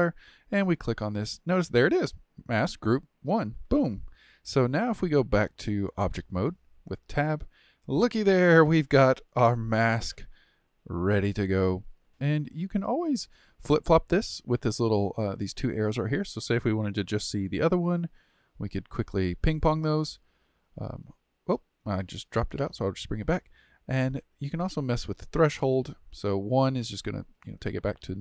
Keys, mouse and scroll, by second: 0.6-3.6 drag, 5.8-8.0 drag, 8.0-9.3 middle drag, 9.3-9.6 scroll down 1, 9.6-15.6 shift+middle drag, 16.0 click, 17.1-20.1 middle drag, 20.4 click, 20.8 click, 22.1-27.2 drag, 27.5-28.2 drag.